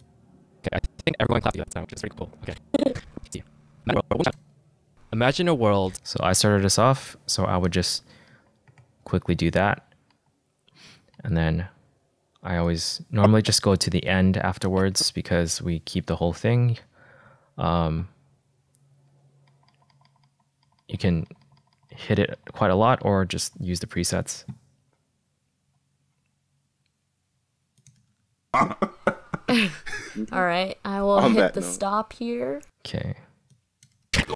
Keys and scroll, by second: 5.0 space, 8.8 =, 9.3 BackSpace, 10.7 -, 11.7 -, 20.0 =, 28.5 space, 32.7 space.